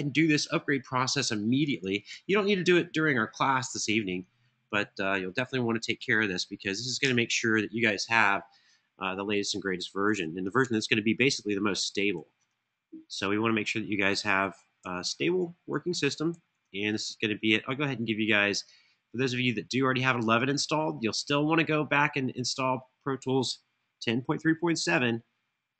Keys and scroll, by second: 1.8 super+c, 5.7 super+v, 6.7 Return, 10.6 super+Tab, 11.6 super+Tab, 11.8 super+Tab, 14.5 super+Tab, 15.6 super+Tab, 16.1 super+Tab, 24.5 super+c.